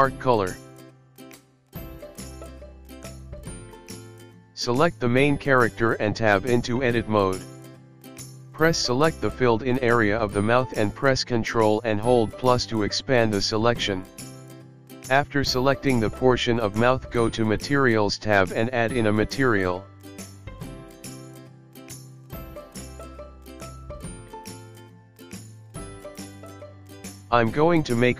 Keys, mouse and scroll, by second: 4.2 click, 4.5-5.6 scroll up 5, 5.6 Tab, 7.4 shift+Left, 8.4 Escape, 9.0 click, 10.7 click, 11.9 click, 12.7-13.3 scroll up 3, 13.3 scroll up 1, 14.1 3, 14.5 click, 15.6 ctrl+KP_Add, 15.8 ctrl+KP_Add, 16.2 ctrl+KP_Add, 16.6 ctrl+KP_Add, 16.9 ctrl+KP_Add, 17.9 ctrl+KP_Subtract, 20.5 click, 21.9 click, 23.4 click, 25.3 click, 26.4 click.